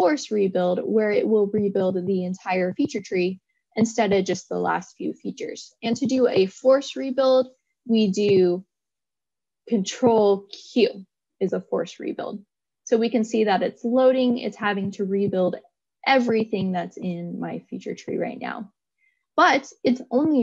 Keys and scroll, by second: 10.1 ctrl+q.